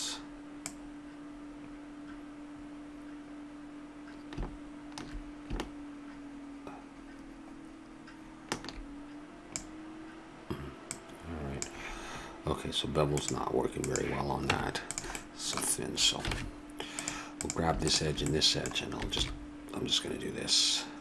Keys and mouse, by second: 0.6-2.5 drag, 10.9-12.9 drag, 13.8-15.5 drag, 14.5 Tab, 16.3 ctrl+Tab, 17.4-19.8 drag, 18.6-19.8 middle drag, 19.1 ctrl+b.